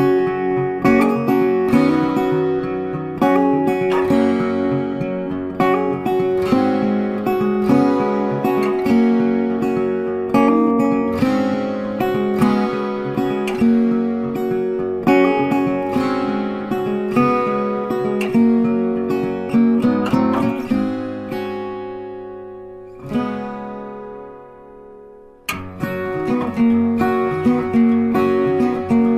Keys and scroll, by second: 9.8 ctrl+t, 26.7 ctrl+d.